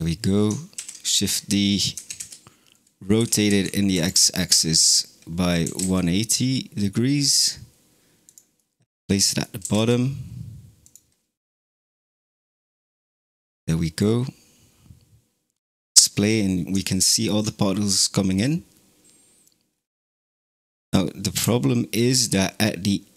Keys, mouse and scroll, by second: 0.6 shift+d, 1.8 r, 5.5 g, 8.4-9.5 middle drag, 9.5 g, 11.6 space, 12.4 click, 13.2-15.8 middle drag, 15.8-16.7 scroll up 4, 16.7-17.6 shift+middle drag, 17.6-18.6 scroll down 2, 18.6-19.3 scroll down 1, 19.3-19.6 scroll down 1, 19.6 scroll up 2, 21.2 KP_0, 22.7-23.1 scroll up 7.